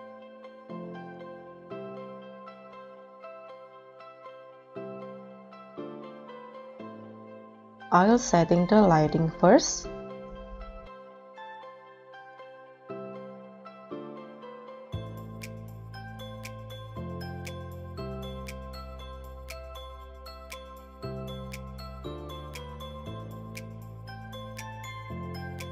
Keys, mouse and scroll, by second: 0.1 scroll up 5, 0.4 r, 1.0 g, 2.0-5.7 typing, 6.9 ctrl+s, 12.1 shift+a, 14.9 3, 15.0 Return, 16.9-17.4 scroll down 5, 17.4-17.7 scroll up 1, 18.1 scroll, 18.2 Delete, 18.6-19.5 scroll down 3, 20.3 r, 23.1 g, 23.5 g, 23.6 middle click, 25.4-25.7 typing.